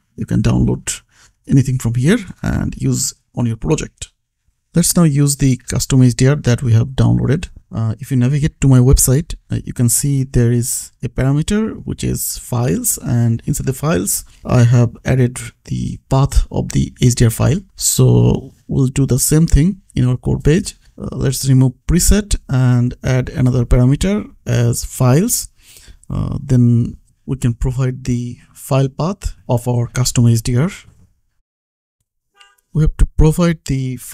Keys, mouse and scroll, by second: 1.3 click, 4.3 click, 6.8 scroll down 1, 7.9 click, 9.0 scroll down 1, 9.6-10.3 scroll up 1, 10.3 click, 13.5 click, 16.4 click, 20.7 click, 22.5 BackSpace, 23.9 click, 24.1 space, 24.6 f, 24.9 l, 25.6 Return, 26.2 ctrl+z, 33.0 click.